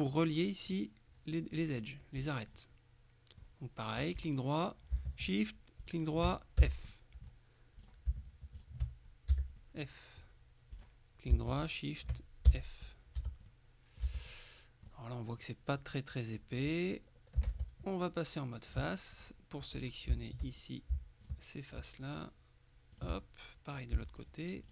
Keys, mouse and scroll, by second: 0.8-2.1 middle drag, 2.3 right click, 2.6 click, 4.2 right click, 5.9 shift+right click, 6.7 shift+f, 7.0 shift+middle click, 7.9 shift+right click, 8.7 shift+right click, 9.4 shift+f, 9.7-10.8 middle drag, 11.7 shift+right click, 12.6 shift+f, 13.0-13.6 shift+scroll down 2, 13.3 Tab, 13.6 middle click, 14.1 Tab, 14.4 middle click, 15.5 middle click, 17.6 ctrl+Tab, 19.2 click, 19.8 right click, 20.6 shift+right click, 21.3 right click, 22.3 right click, 23.0 right click, 23.3 click, 24.3 shift+right click.